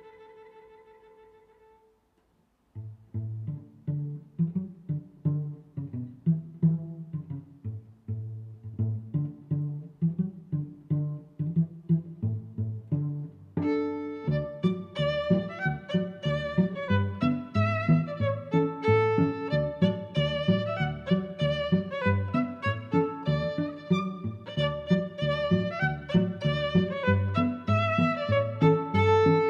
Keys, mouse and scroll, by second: 0.7 click, 1.0 middle click, 2.4 a, 2.7 right click, 2.9 click, 3.7 click, 4.1 5, 4.3 0, 4.6 click, 5.4 Tab, 5.7 middle click, 7.2 click, 7.5 click, 8.1 click, 8.7 click, 9.4 click, 24.1 middle click, 26.7 click.